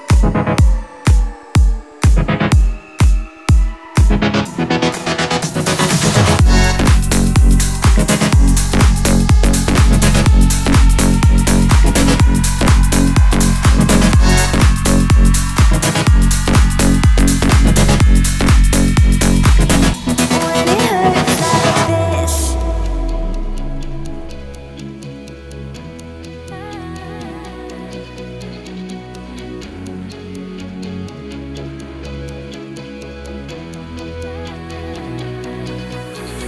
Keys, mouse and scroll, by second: 1.3-2.8 alt+shift+drag, 4.0 right click, 6.4-8.4 drag, 9.0-9.7 alt+scroll up 2, 10.3 alt+shift+click, 10.5-11.0 alt+shift+click, 11.6-12.7 drag, 13.7 Up, 14.8 Left, 17.8-18.4 alt+scroll down 2, 18.7 click, 19.4-20.5 alt+scroll up 1, 21.2-22.7 drag, 23.0 alt+scroll up 1, 24.2-25.0 alt+shift+click, 25.4 right click, 27.2 click, 28.9-30.5 alt+shift+drag, 30.9-31.5 alt+scroll up 2, 31.5-32.6 drag.